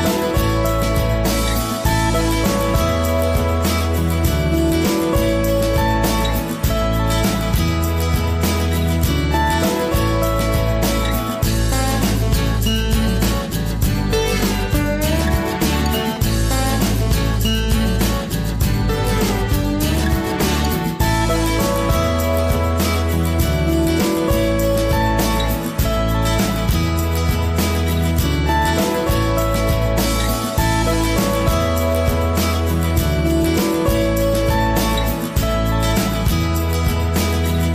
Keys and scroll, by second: 10.7 ctrl+c, 10.8 ctrl+v, 14.6 ctrl+c, 14.8 ctrl+v, 25.0 ctrl+c, 25.7 ctrl+v.